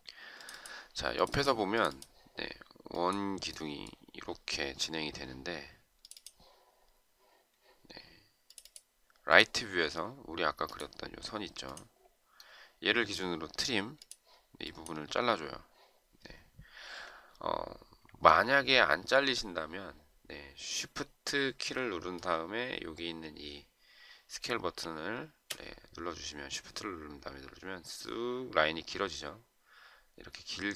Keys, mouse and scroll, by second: 18.0 Escape.